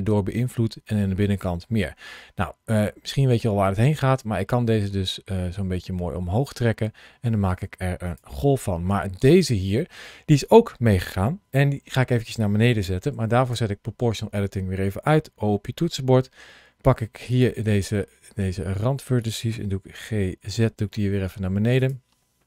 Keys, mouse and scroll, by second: 0.3 scroll up 1, 1.3 scroll down 2, 2.3-5.5 scroll up 2, 6.1-7.9 scroll down 2, 7.9 click, 13.4 o, 17.1 click, 17.8 middle click, 19.8 g, 20.3 z, 21.6 click.